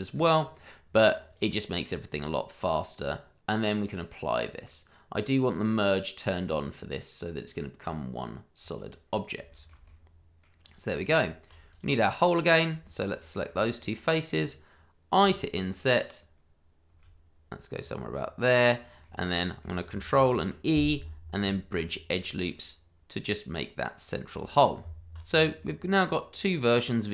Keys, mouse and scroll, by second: 0.1 click, 0.8-1.2 scroll down 1, 1.2 click, 7.4 click, 9.5 shift+middle click, 9.8 middle click, 10.7 click, 11.7 click, 12.1 middle click, 13.1 shift+middle click, 13.2 middle click, 15.8 click, 16.9 i, 18.7 click, 19.0 middle click, 20.3 ctrl+e, 21.7 click, 22.5 middle click, 24.4 shift+middle click, 24.4 middle click, 24.8 Tab, 25.3 scroll down 1, 25.6 middle click.